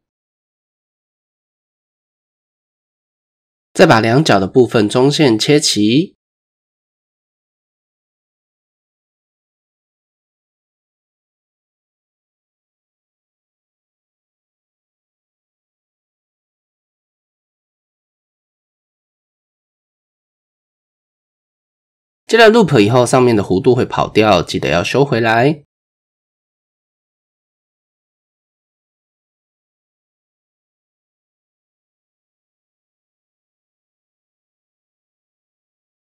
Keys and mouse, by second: 0.3 ctrl+r, 3.9 click, 7.4 click, 8.3 ctrl+click, 9.9 s, 14.4 s, 17.1 shift+click, 20.1 Tab, 21.2 middle click, 21.6 shift+click, 22.2 Tab, 23.7 click, 24.5 shift+click, 25.8 click, 26.8 click, 27.9 click, 29.2-30.9 drag, 31.0 Tab, 31.6 shift+click, 32.0 Tab, 33.8 s, 35.0 Tab.